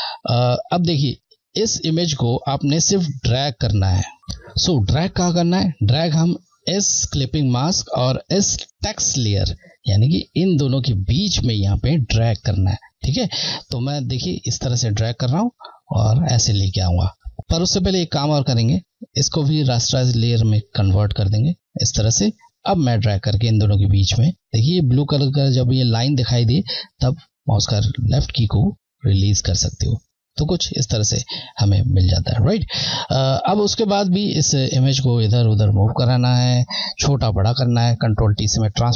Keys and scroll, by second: 14.6 Left, 20.2 Right, 21.8 Left, 35.3 Left, 38.2 ctrl+t.